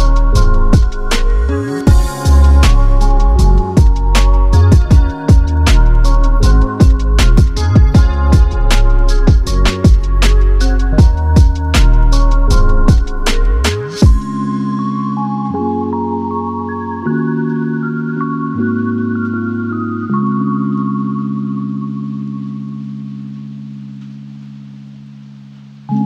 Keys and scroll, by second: 18.8 <, 18.9 shift+,.